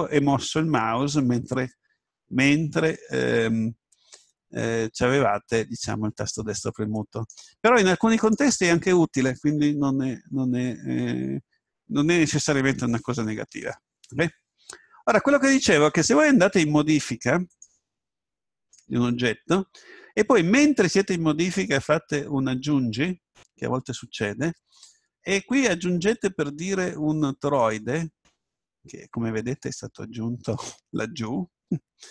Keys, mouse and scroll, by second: 1.1 right click, 17.5-20.0 drag, 23.6 shift+a.